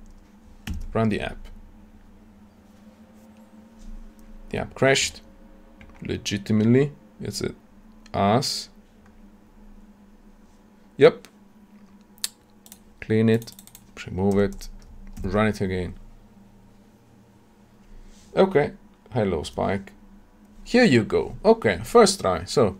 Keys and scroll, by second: 0.7 shift+F10, 15.1 shift+F10.